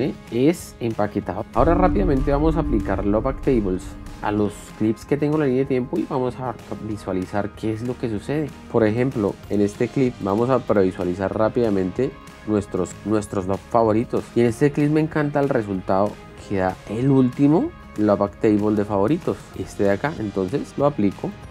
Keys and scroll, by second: 18.9 shift+f.